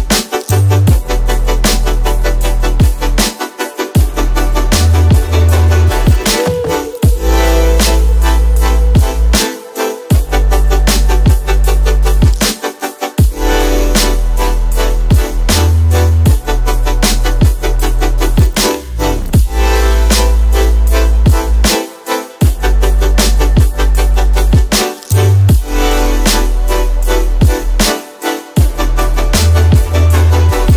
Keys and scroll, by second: 12.6 ctrl+KP_0, 17.4 b, 21.0 ctrl+i, 23.1 ctrl+alt+shift+e, 24.4 ctrl+alt+shift+e.